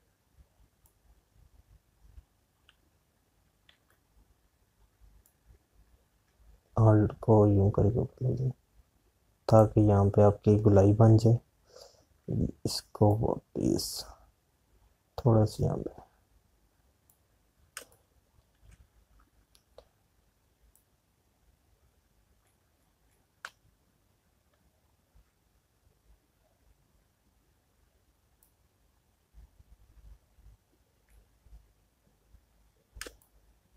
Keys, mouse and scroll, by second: 4.7 ctrl+z, 6.3-10.5 drag, 10.5-14.0 drag, 14.0-18.6 alt+drag, 18.6 space, 18.8 click, 19.3 space, 21.9-33.7 drag.